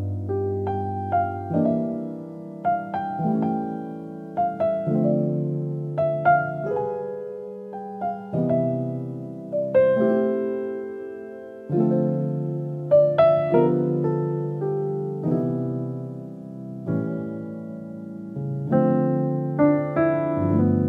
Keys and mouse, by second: 0.5 Tab, 1.1 Tab, 2.2 Tab, 2.4 click, 2.9 click, 4.5 KP_7, 6.6 click, 8.3 middle click, 9.2 KP_7, 10.1 s, 11.6 click, 13.5 ctrl+z, 14.2 s, 18.8-19.8 alt+middle drag.